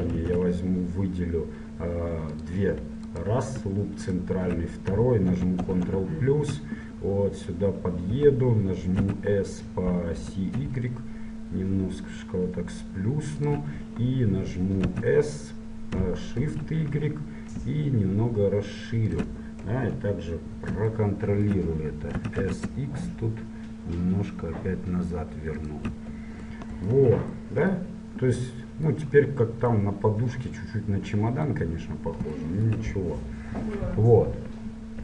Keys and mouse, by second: 0.3 ctrl+Tab, 3.2 click, 5.7 ctrl+KP_Add, 5.7 click, 9.1 s, 15.0 s, 19.8 KP_1, 22.3 s, 26.9 middle click, 27.1 Tab, 27.7-30.3 middle drag.